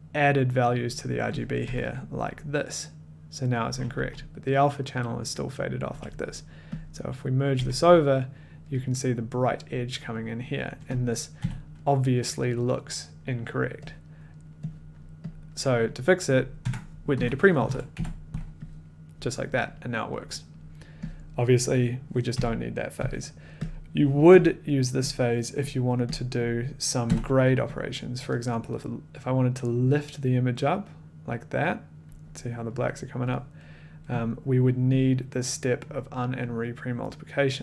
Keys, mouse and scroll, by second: 1.5 click, 1.6 1, 3.9 a, 5.8 a, 7.4 click, 7.5 1, 10.2 middle click, 11.0 click, 11.4 f, 14.0 click, 14.0 middle click, 15.0 click, 15.0 middle click, 15.3 click, 16.3 click, 16.6 Tab, 16.9-18.4 typing, 18.6 click, 19.7 scroll, 20.3 scroll, 21.5 click, 22.3-23.0 typing, 23.6 click, 24.6 click, 25.4 click, 25.9 click, 26.1 click, 26.4 click, 27.1 g, 27.9 click, 32.0 click, 32.8 middle click, 33.7 middle click, 34.2 click, 34.2 middle click, 34.9 click, 35.9 click, 37.0 click.